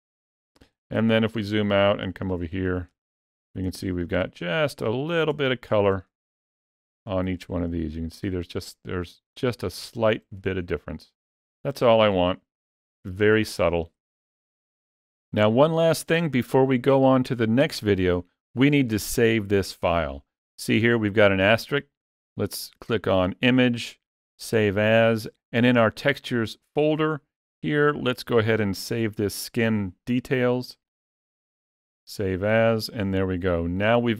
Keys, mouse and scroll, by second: 0.6 ctrl+middle click, 1.0 ctrl+middle click, 1.4 shift+middle click, 1.9 ctrl+middle click, 2.8 ctrl+middle click, 3.6 shift+middle click, 4.3 ctrl+middle click, 5.3 shift+middle click, 5.3 shift+click, 6.0 middle click, 7.3 ctrl+middle click, 9.2 ctrl+middle click, 10.3 middle click, 11.6 ctrl+middle click, 12.0 ctrl+middle click, 12.7 shift+middle click, 13.3 ctrl+middle click, 13.9 middle click, 14.6 shift+middle click, 22.2 click, 33.2-33.5 scroll down 1.